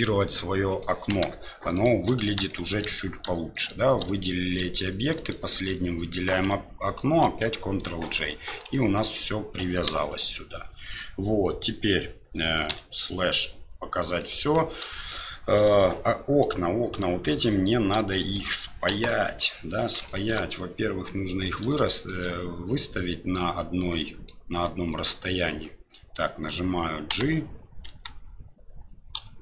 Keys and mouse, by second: 1.7 shift+right click, 2.5 shift+middle drag, 3.6 shift+right click, 5.1 shift+right click, 7.2 ctrl+j, 8.1-8.5 middle drag, 8.7 shift+middle drag, 9.9 KP_7, 12.7 KP_Divide, 14.2-14.5 middle drag, 14.9 shift+middle drag, 15.5 right click, 16.4 right click, 16.9 right click, 18.2 shift+middle click, 18.9 KP_7, 20.1 shift+middle drag, 21.9 shift+middle click, 24.1 shift+middle click, 27.1 g.